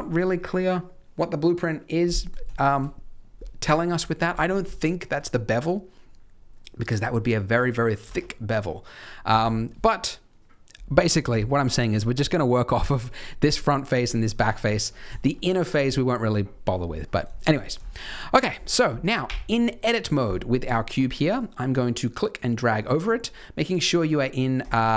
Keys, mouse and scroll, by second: 2.5 shift+middle click, 4.7 shift+middle click, 6.7-7.3 scroll down 5, 7.3 scroll up 2, 10.9-11.4 scroll up 3, 11.4 shift+middle click, 11.7 shift+middle click, 12.1-14.0 scroll up 1, 14.0 scroll up 1, 14.5-15.0 scroll down 5, 15.1 shift+middle click, 16.9 scroll up 4, 17.3 shift+middle click, 17.6 scroll down 1, 18.0 shift+middle click, 18.0 scroll up 1, 19.2 Tab, 20.6 click, 21.3 click, 23.9 click, 24.5 click.